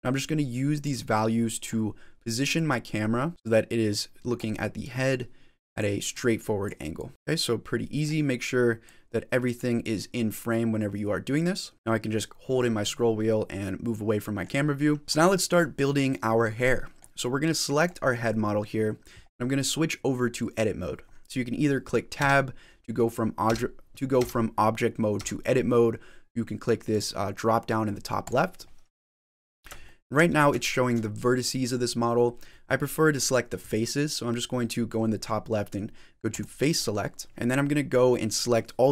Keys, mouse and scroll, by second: 0.7 click, 2.4 click, 3.3 ctrl+z, 3.3 click, 4.7 click, 6.0-7.1 click, 6.8 click, 8.7 click, 9.7 click, 11.6 click, 13.0 middle click, 14.4-15.0 scroll down 2, 15.8 scroll down 5, 16.2 middle click, 17.6 click, 19.6-20.7 scroll up 4, 22.6 Tab, 23.3 Tab, 24.0 Tab, 25.0 Tab, 26.8 click, 28.7 middle click, 29.7 shift+middle click, 30.2 scroll up 4, 30.6 shift+middle click, 36.2 click, 37.3 click, 37.3 shift+middle click.